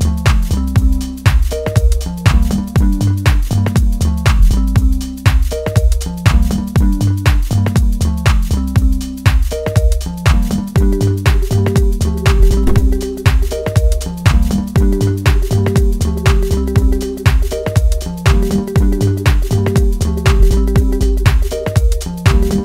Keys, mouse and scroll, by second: 1.6-4.3 drag, 4.3-6.0 middle drag, 6.0 click, 7.3-7.8 scroll down 1, 7.8-10.5 middle drag, 10.5-11.0 scroll down 2, 11.0 shift+middle click, 11.8-12.2 scroll up 1, 12.2-13.8 middle drag, 13.8 click, 16.3-20.2 middle drag, 20.2-22.6 right drag.